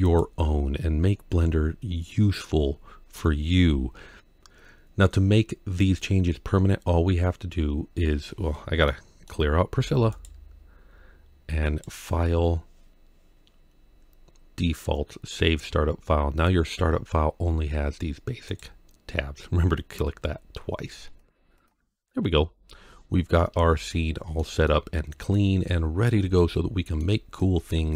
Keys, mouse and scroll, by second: 0.0 right click, 1.3-1.8 scroll down 1, 1.8 scroll down 1, 2.5 scroll down 1, 8.3 scroll down 1, 8.7-9.1 middle drag, 9.5 x, 11.5-16.8 drag, 18.3-21.6 drag, 22.1-23.5 scroll down 4, 23.7-24.2 shift+middle drag, 24.5-25.1 middle drag, 25.7 scroll down 1, 26.2-26.8 shift+middle drag, 26.9-27.2 shift+scroll down 1, 27.2-27.9 middle drag.